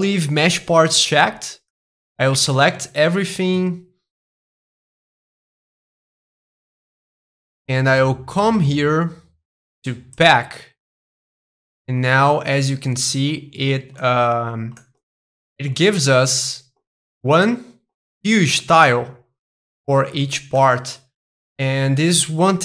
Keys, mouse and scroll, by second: 0.0-1.5 drag, 1.8 middle click, 2.5 a, 4.7-6.7 drag, 6.8-7.9 drag, 7.9-9.9 middle drag, 10.2-12.2 drag, 12.5-16.1 middle drag, 16.3-18.4 middle drag, 18.6-22.6 middle drag.